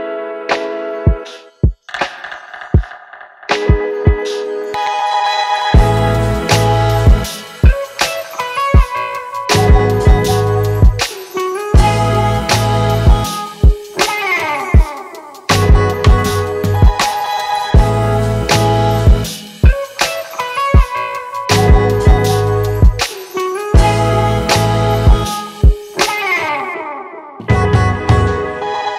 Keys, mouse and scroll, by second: 21.0 double click.